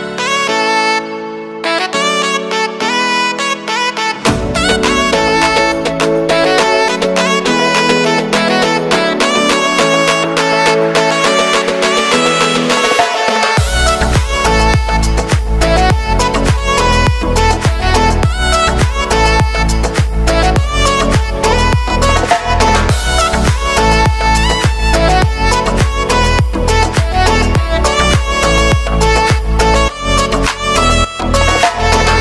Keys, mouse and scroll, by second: 2.7 click, 3.3 Return, 4.9 click, 10.3 click, 13.2 u, 13.8 click, 15.8-16.2 typing, 18.0 click, 18.3 Right, 18.7 Return, 19.8 click, 19.9 click, 21.1 Right, 23.7 Return, 24.2 click, 28.6 click, 29.6 Return.